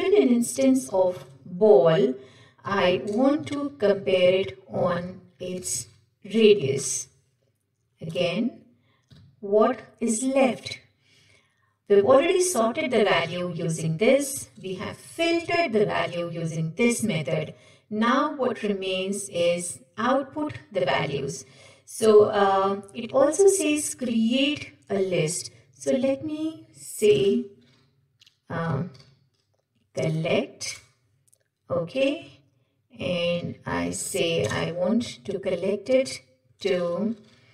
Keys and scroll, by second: 6.9 Return, 10.8 Escape, 13.4 ctrl+shift+Right, 15.0 ctrl+shift+Left, 24.2 ctrl+shift+Right, 30.9 Return.